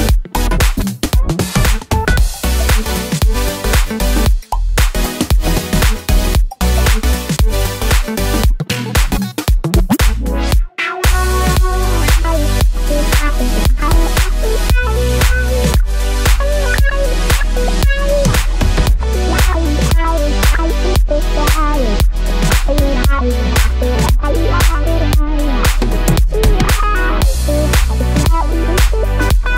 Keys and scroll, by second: 7.7 Right, 7.8 Right, 8.1 Right, 8.4 Right.